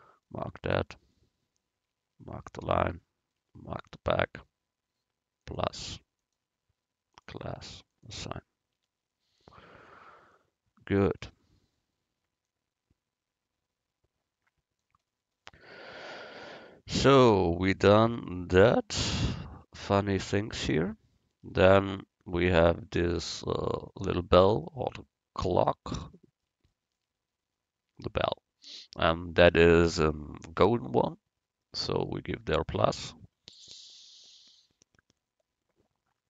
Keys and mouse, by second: 0.7 click, 3.1-5.5 right drag, 5.6-8.8 drag, 8.8 Tab, 11.4 click, 11.4 right click, 11.7 click, 12.5-14.4 drag, 16.2 a, 23.2-25.1 drag, 25.1 middle click, 25.7-26.8 right drag, 26.8 middle click, 32.7-34.5 drag.